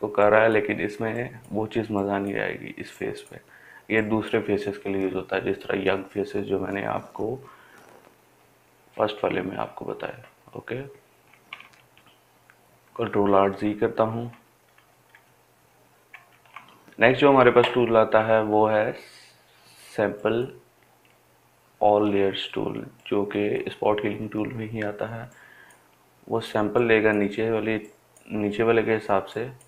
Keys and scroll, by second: 13.2 ctrl+alt+z, 13.5 ctrl+alt+z, 13.9 ctrl+alt+z, 14.2 ctrl+alt+z, 14.5 ctrl+alt+z, 15.0 ctrl+alt+z, 15.3 ctrl+alt+z, 16.3 ctrl+alt+z.